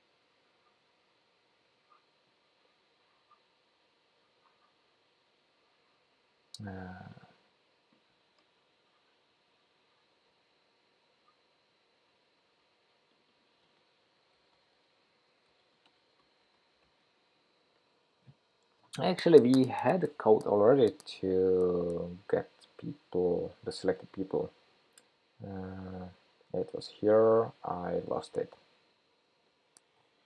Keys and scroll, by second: 1.1 super+v.